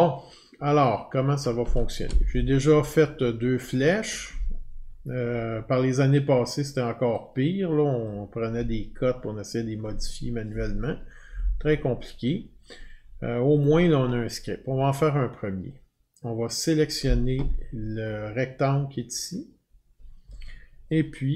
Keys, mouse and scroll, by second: 0.3 alt+scroll, 0.8 alt+scroll, 2.7-3.4 alt+scroll, 8.0 click, 13.6 click, 16.7 click.